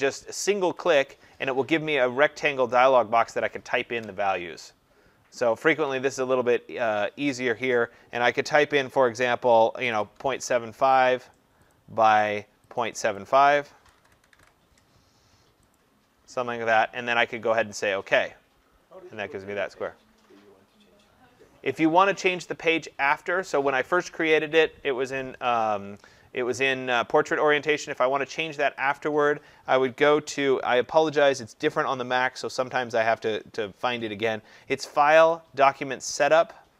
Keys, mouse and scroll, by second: 0.9 click, 9.8-10.4 typing, 11.8 click, 12.3 click, 12.9 click, 13.5 click, 14.0-14.4 typing, 15.8 click, 18.0 click, 29.0 click, 35.3 click.